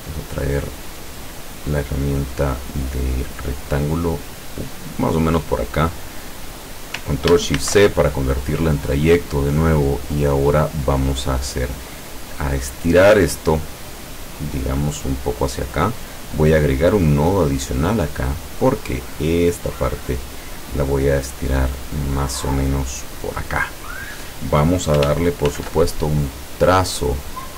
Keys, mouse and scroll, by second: 0.1 scroll up 2, 2.7-6.2 drag, 7.7 ctrl+shift+c, 9.5 click, 12.2-16.3 drag, 16.9 click, 18.9-23.4 drag, 25.6 ctrl+shift+f.